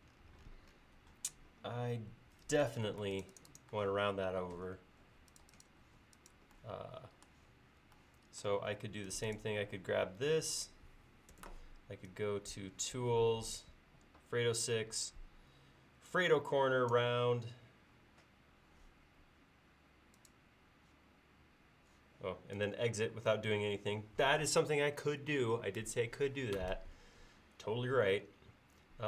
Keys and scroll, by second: 2.9 space, 11.3 ctrl+s.